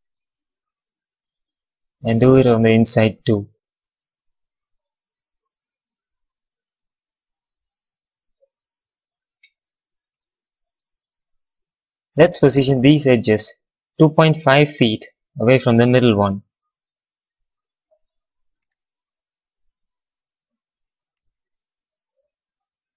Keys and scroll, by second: 14.6 space, 16.6 f, 18.5 space, 20.7 f, 20.9 space.